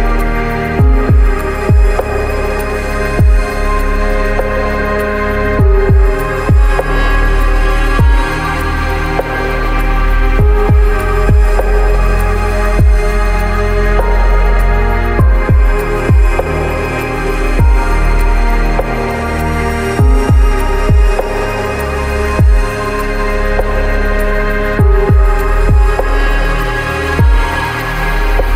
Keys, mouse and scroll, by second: 0.1 click, 0.5 click, 0.6 shift+middle click, 1.0 shift+middle click, 1.4-1.7 scroll up 6, 2.0 shift+middle click, 2.7 ctrl+z, 2.9 ctrl+z, 3.0 middle click, 3.3 shift+middle click, 3.8 shift+middle click, 4.1 ctrl+middle click, 4.3 shift+middle click, 4.5 ctrl+shift+middle click, 5.3 ctrl+shift+middle click, 5.7 ctrl+middle click, 6.1 shift+middle click, 6.9 middle click, 7.5 middle click, 7.7 middle click, 7.9 middle click, 8.5 ctrl+middle click, 8.8 ctrl+middle click, 9.2 ctrl+z, 9.4 ctrl+middle click, 9.9 middle click, 10.2 middle click, 10.5 middle click, 10.7 middle click, 11.3 middle click, 11.5 middle click, 12.7 shift+middle click, 14.3 middle click, 14.5 shift+middle click, 15.0 middle click, 15.6 middle click, 16.2 middle click, 17.1 ctrl+middle click, 18.3 middle click, 18.9 middle click, 19.3 middle click, 20.5 shift+middle click, 21.1 middle click, 21.9 middle click, 23.0 shift+middle drag, 23.2 middle click, 26.1 ctrl+middle click, 26.4 ctrl+click, 26.8 middle click, 26.8 KP_0, 27.2 middle click, 28.3 middle click.